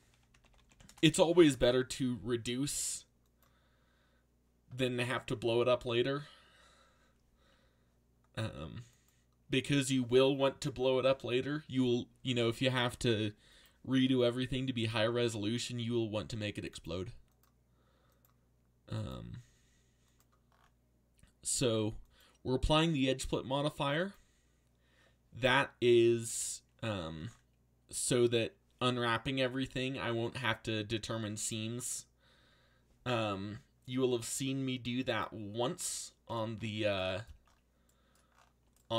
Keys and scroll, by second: 0.0-1.2 typing.